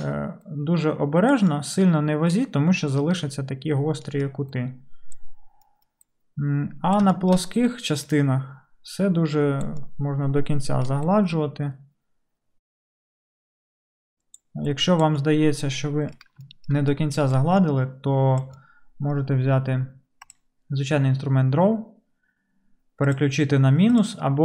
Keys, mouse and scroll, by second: 16.8-23.3 shift+middle drag, 23.3-24.0 drag, 24.0 middle click, 24.0-24.4 drag.